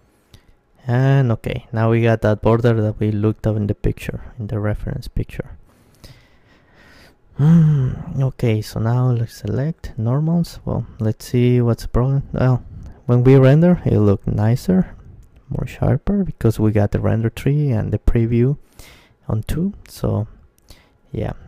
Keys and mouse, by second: 0.9-5.3 middle drag, 5.3 Tab, 6.4 a, 6.7 a, 7.7 ctrl+n, 8.1 Tab, 9.3 shift+space, 12.0-13.8 drag, 13.8-15.5 middle drag, 14.7 click, 18.0-19.7 drag, 18.6 shift+space, 19.7-21.4 middle drag.